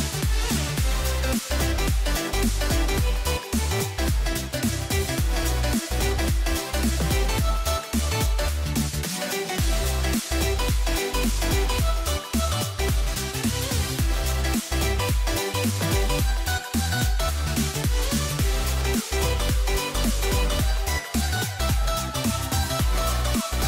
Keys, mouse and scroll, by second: 0.6-3.7 middle drag, 5.4 u, 7.2 c, 9.3 r, 11.5-13.8 middle drag, 13.8 ctrl+s, 16.4 KP_1.